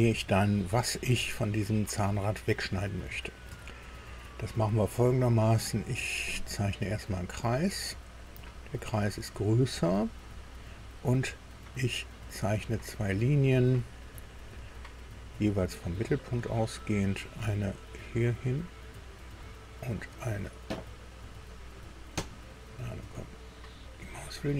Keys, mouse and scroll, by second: 3.0 scroll down 2, 3.6 shift+middle click, 6.2 click, 8.2 click, 9.3 click, 14.1 click, 16.6 click, 18.2 click.